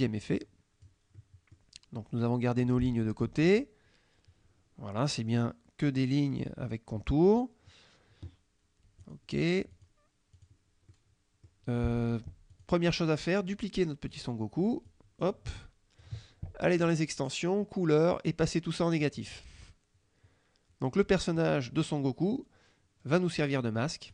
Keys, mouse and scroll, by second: 1.2 middle click, 2.7 middle click, 2.8 click, 3.4 F2, 3.5 click, 8.9 F1, 9.1 click, 9.8 click, 10.5 click, 11.0 click, 12.6 click, 14.2 click, 14.9-16.2 drag, 16.9 click, 19.2 click.